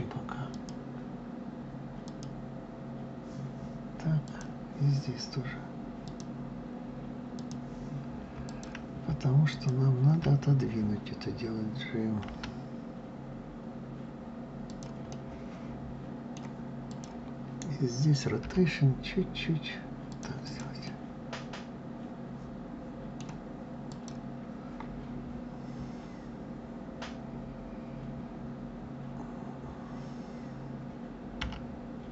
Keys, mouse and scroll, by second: 0.1 click, 3.8 click, 5.6 click, 7.0 click, 8.1 click, 9.1 shift+click, 11.9 g, 14.7-16.5 middle drag, 16.5 click, 18.1 r, 20.1 click, 20.5-23.5 middle drag, 23.5 click.